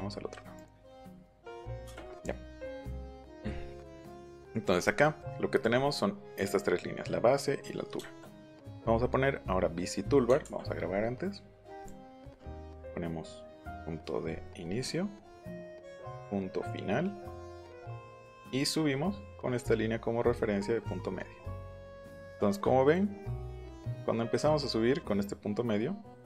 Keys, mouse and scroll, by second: 5.6 click, 10.4 ctrl+s, 11.7 click, 14.3 scroll down 2, 14.6 scroll up 2, 15.5 click, 15.7 scroll down 2, 17.7 click, 17.9-18.3 scroll down 2, 18.9 scroll up 1, 21.4 scroll down 1.